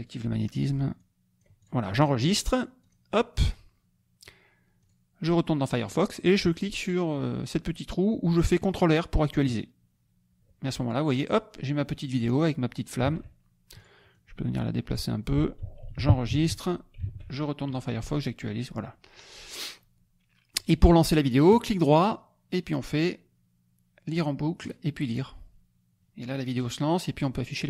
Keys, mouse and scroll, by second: 0.0 click, 0.9 click, 1.8-2.2 scroll up 1, 2.8 click, 4.8 click, 9.4 click, 13.0 alt+Tab, 13.7 click, 14.1 click, 15.9 ctrl+s, 16.4 ctrl+alt+Tab, 17.1 alt+Tab, 17.7 click, 21.5 right click, 24.1 click, 24.6 right click, 25.1 click, 26.5 right click.